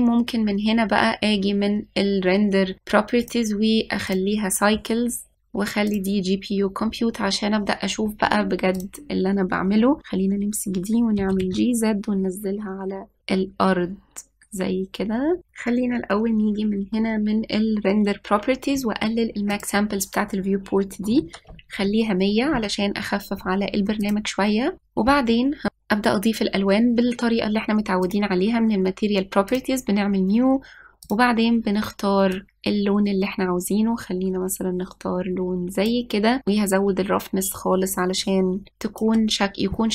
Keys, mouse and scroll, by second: 0.3 click, 3.9-5.4 drag, 5.7-8.8 drag, 9.6 click, 10.7 drag, 12.0 g, 15.5 click, 20.3-22.5 drag, 22.5 KP_0, 24.8 click, 28.8 click, 30.3-32.0 drag, 36.5-39.0 drag.